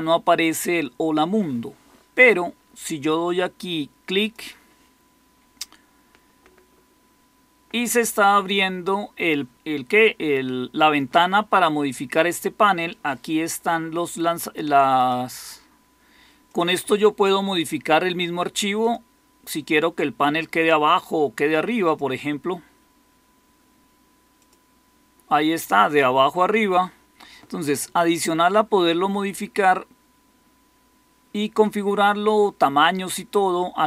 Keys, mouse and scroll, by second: 15.7 typing.